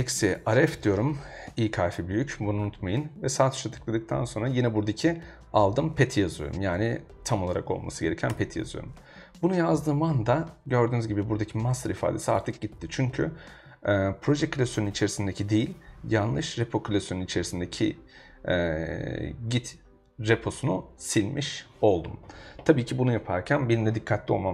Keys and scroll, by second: 0.0-0.8 typing, 8.3 Return.